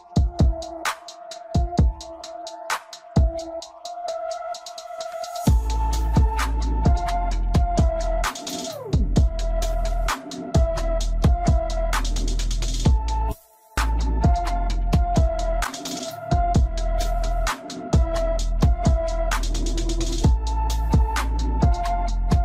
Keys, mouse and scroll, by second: 1.5-1.9 scroll up 2, 1.9-3.2 middle drag, 3.2-4.4 scroll down 3, 7.4-12.6 drag, 12.6-13.0 scroll up 1, 13.0-13.9 middle drag, 13.9-14.3 scroll up 2, 14.3-15.0 shift+middle drag, 15.0-15.6 scroll up 1, 17.0-18.2 drag, 18.2 s, 19.6 click, 20.7 drag.